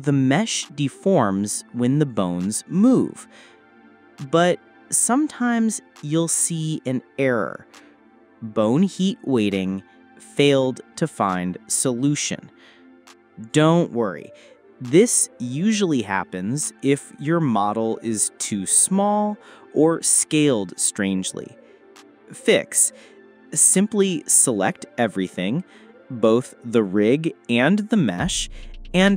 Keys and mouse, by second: 0.3 ctrl+z, 1.0 ctrl+z, 2.4 ctrl+z, 2.8 ctrl+z, 3.6 ctrl+z, 4.4 ctrl+z, 5.1 ctrl+z, 6.0 ctrl+z, 6.7 ctrl+z, 8.6 click, 11.6 click, 13.6-14.5 drag, 15.6 a, 20.2 s, 24.7 click, 26.4 click.